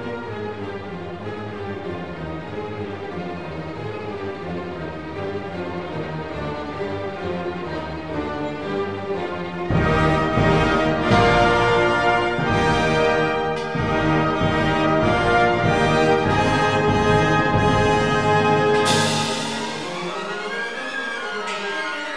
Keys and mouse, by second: 2.5 ctrl+r, 4.2 click, 5.3 ctrl+r, 7.2 click, 10.7 ctrl+r, 13.2 click, 14.5 ctrl+r, 16.2 click, 17.8 1, 21.7 click.